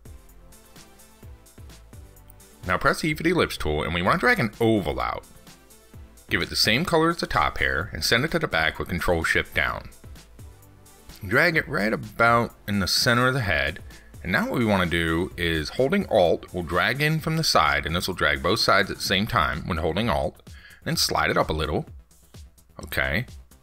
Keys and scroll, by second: 10.2 ctrl+shift+Down.